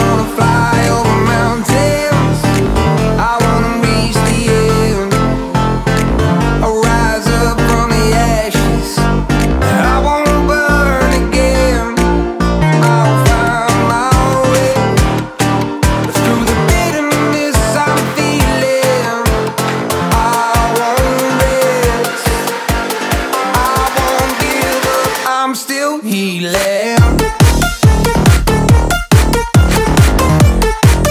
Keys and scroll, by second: 0.0 b, 3.3 [, 4.6 ], 12.1 ], 14.6 [, 18.7 b, 21.4 ].